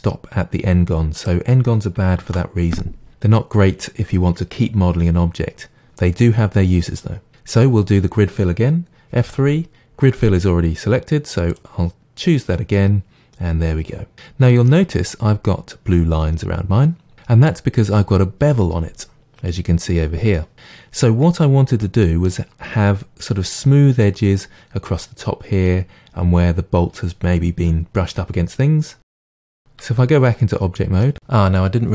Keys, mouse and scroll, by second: 1.3 right click, 2.2 ctrl+z, 9.1 F3, 14.1-17.1 middle drag, 21.8-22.5 middle drag, 22.5-24.2 scroll up 2, 24.2-28.2 middle drag, 28.9-29.3 middle drag, 29.8 Tab, 29.8-30.3 right drag, 30.5-31.9 middle drag.